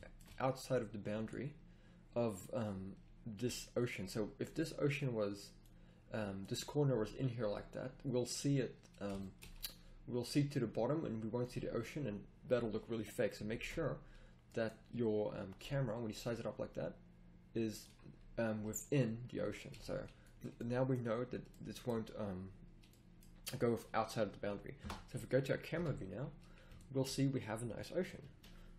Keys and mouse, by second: 0.7 click, 2.7-3.1 middle drag, 3.8 right click, 4.1-5.0 drag, 5.6-6.9 drag, 6.9 right click, 6.9-9.1 middle drag, 12.5-13.6 middle drag, 13.6 ctrl+z, 15.4 s, 19.7 a, 24.8 KP_0, 25.7 a.